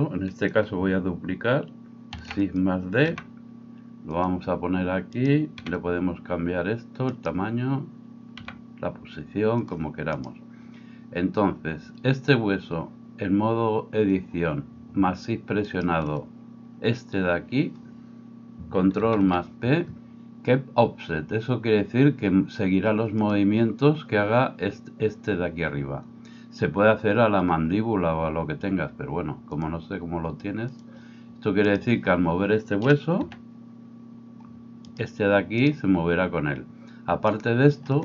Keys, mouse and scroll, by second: 2.2 shift+d, 2.6-5.2 middle drag, 3.1 g, 5.2 right click, 5.6-15.7 middle drag, 5.6 g, 15.7 shift+right click, 15.9-29.7 shift+middle drag, 19.0 ctrl+p, 29.7-38.0 drag, 31.6-33.3 middle drag, 31.6-33.3 right drag, 33.3 r, 35.6 right click.